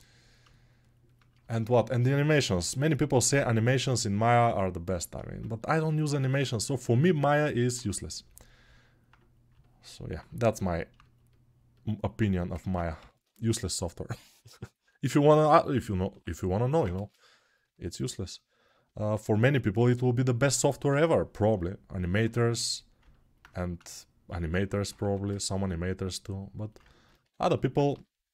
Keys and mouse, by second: 2.3 g, 24.8 2, 27.7 g.